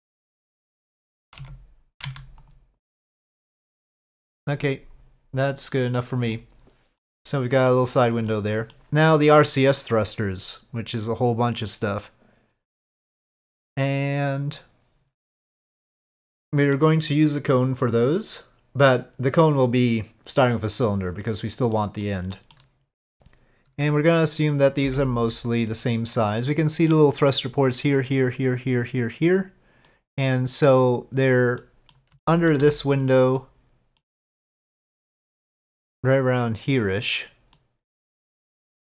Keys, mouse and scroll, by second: 1.4 Tab, 1.9 middle click, 2.0 Tab, 2.8 middle drag, 3.0-3.4 drag, 3.4-4.3 middle drag, 5.4-6.3 middle drag, 7.0-7.7 middle drag, 8.3-8.7 middle drag, 16.3-16.7 middle drag, 17.9-22.0 drag, 22.4 drag, 24.8 s, 29.9-30.8 middle drag, 31.6-32.0 middle drag, 32.2-32.6 shift+middle drag, 33.4-34.1 middle drag, 37.6-38.8 middle drag.